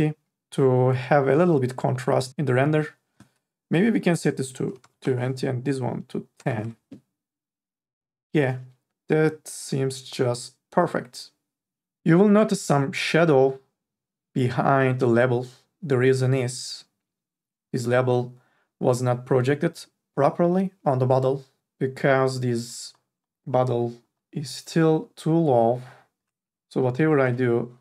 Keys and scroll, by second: 5.0 KP_2, 5.0 Return, 6.3 KP_1, 6.6 Return, 27.1 n, 27.5 b.